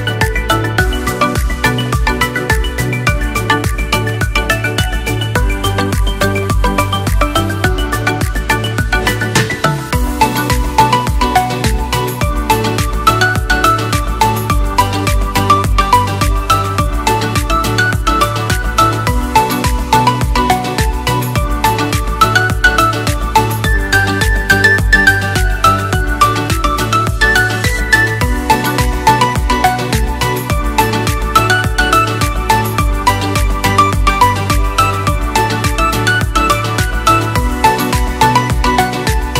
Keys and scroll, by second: 3.7 ctrl+0, 8.6 Delete, 11.9 Delete, 19.3 ctrl+v, 27.8 ctrl+=, 29.3 ctrl+-, 29.9 ctrl+0.